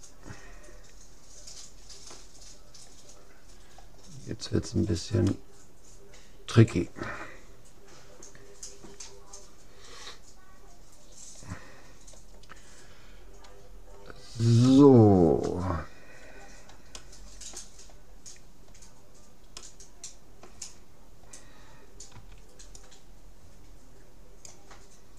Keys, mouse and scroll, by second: 3.6-7.0 middle drag, 14.8-16.4 middle drag, 16.4-17.0 scroll up 1, 17.0-18.8 middle drag, 18.8 scroll up 1, 19.0-19.6 scroll down 1, 19.6-21.4 middle drag, 21.4-22.6 scroll down 1, 22.1 c.